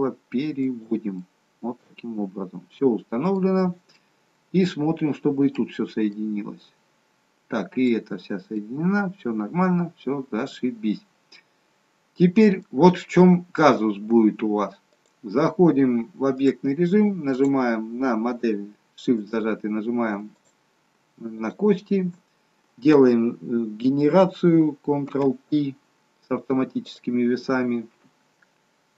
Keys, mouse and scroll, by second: 1.1 middle click, 3.8 middle click, 6.1 middle click, 8.5 middle click, 15.0 click, 17.3 click, 19.1 shift+click, 20.3 click, 21.6 shift+click, 25.0 ctrl+p.